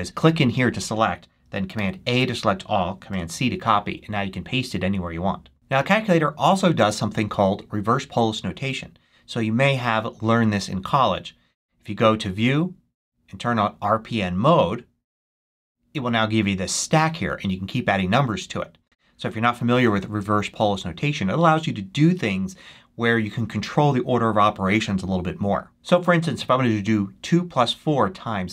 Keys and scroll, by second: 1.6 super+a, 3.0 super+c.